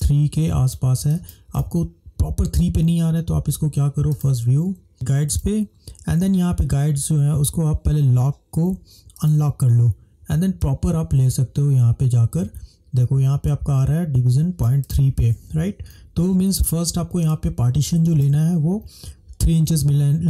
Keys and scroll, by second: 16.2 ctrl+-, 16.4 ctrl+-, 16.7 ctrl+-, 17.2 typing.